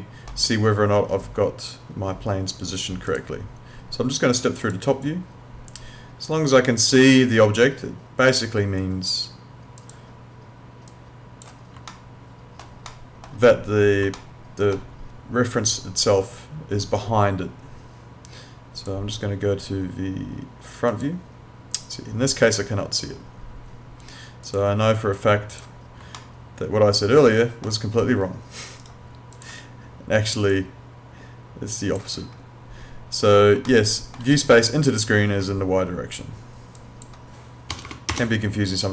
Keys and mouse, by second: 3.1 click, 9.8 click, 11.9 alt+middle click, 14.2 alt+middle click, 18.8 click, 24.4 click, 26.2 alt+middle click, 28.8 right click, 29.4 click, 33.7 alt+middle click, 36.8 click, 37.8 BackSpace.